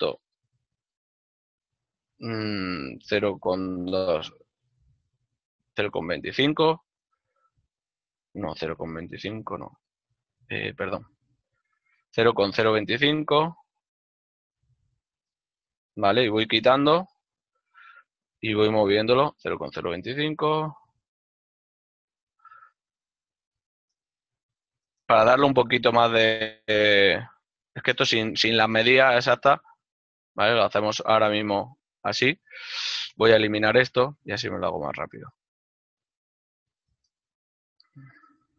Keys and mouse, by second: 4.5 KP_5, 7.1 Return, 9.1 ctrl+z, 11.8 y, 12.5 KP_0, 14.5 Return, 14.5 KP_Enter, 17.0-17.9 typing, 21.8 shift+l, 23.6 y, 24.8 KP_5, 24.9 Return, 24.9 KP_Enter, 27.4 shift+l, 34.4 click.